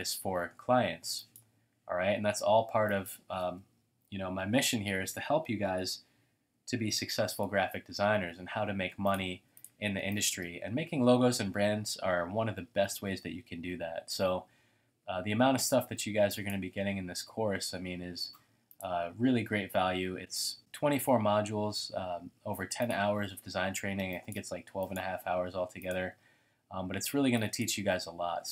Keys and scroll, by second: 3.8-5.2 typing, 7.1-7.5 typing.